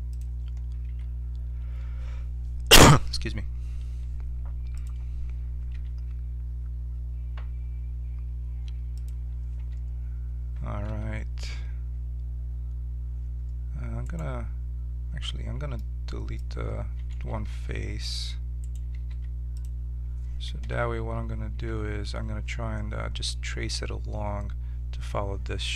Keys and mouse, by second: 0.9 s, 5.7 g, 9.6 Tab, 10.9 ctrl+Tab, 14.0 click, 17.1 ctrl+Tab, 19.1 x, 20.7 KP_7, 20.9 z, 21.6 z.